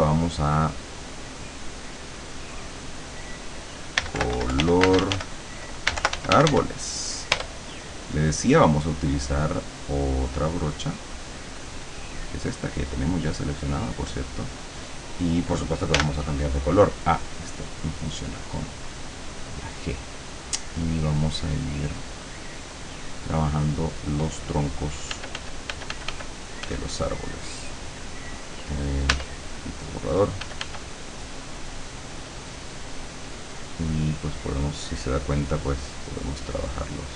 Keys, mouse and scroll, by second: 1.1 click, 1.8 click, 2.7 click, 3.7 right click, 3.8-7.0 typing, 7.4 Return, 10.4 click, 12.0 click, 13.8 click, 16.0 g, 17.6 click, 19.4-20.7 drag, 21.0-22.6 drag, 25.2 f, 29.2 e, 30.5 f, 33.5-34.6 drag, 35.4 click, 36.2 click.